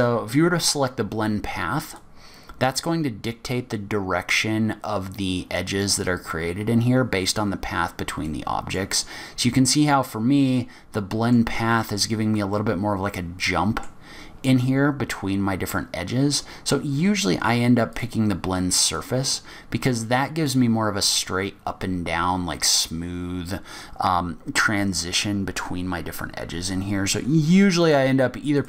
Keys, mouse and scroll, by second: 0.0 click, 8.5 middle click, 9.4-10.7 scroll up 3, 10.7 middle click, 12.7 middle click, 15.9 middle click, 16.9 scroll down 2, 18.1 click, 20.2 middle click, 28.0 click.